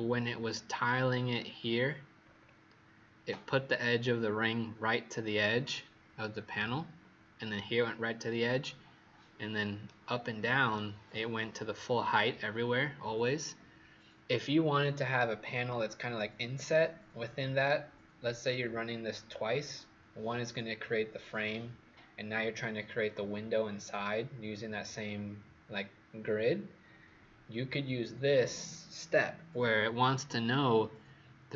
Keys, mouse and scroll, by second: 1.0-2.1 scroll down 5, 2.1-7.6 scroll up 3, 9.8 right click.